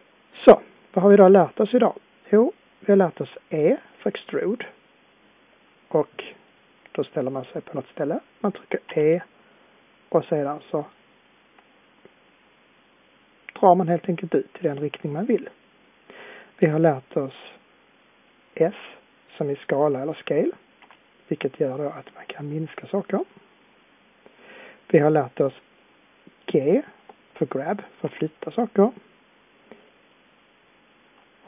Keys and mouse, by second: 8.8 e, 20.7 s, 28.0 g.